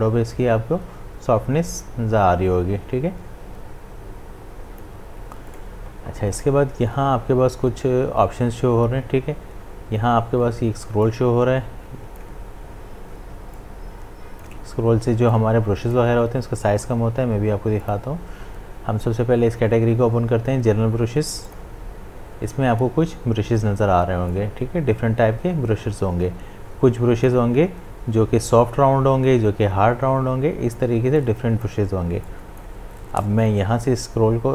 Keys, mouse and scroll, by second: 5.5 right click, 11.1-17.8 drag, 21.5 click, 24.3-29.6 drag, 31.2-34.5 drag.